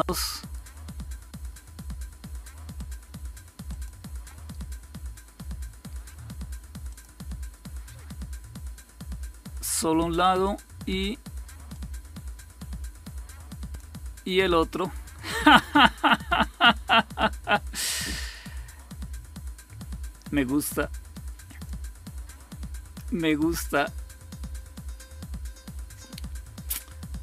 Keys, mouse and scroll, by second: 2.7 click, 4.4 right click, 6.8 click, 11.6-13.7 drag, 21.4 click.